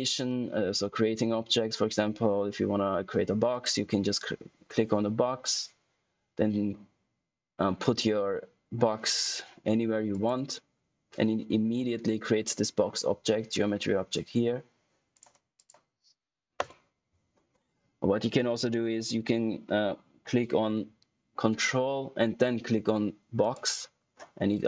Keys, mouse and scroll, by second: 3.4 click, 10.0 click, 15.1 click, 23.3 ctrl+Num_Lock, 23.3 ctrl+click.